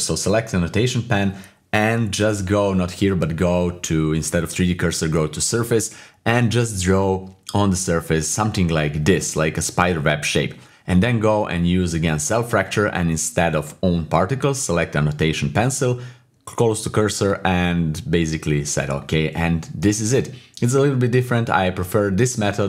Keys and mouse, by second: 2.2 click, 4.6-5.6 drag, 7.0 click, 7.6 click, 7.8 click, 8.0 click, 8.2 click, 8.3 click, 8.6 click, 8.8 click, 9.4 click, 9.5 click, 9.8 click, 10.7-22.2 drag, 22.2 /.